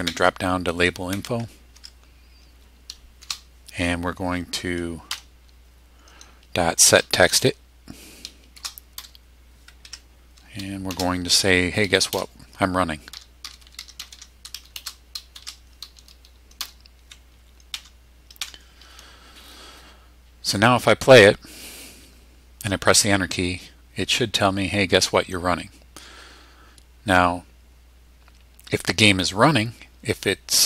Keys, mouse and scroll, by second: 0.7 Up, 1.1 Down, 1.8 Tab, 3.2 shift+0, 5.1 ., 6.7-8.9 typing, 9.8 Tab, 10.9 shift+', 12.1-15.3 typing, 16.6 Return, 17.7 BackSpace, 18.4 BackSpace.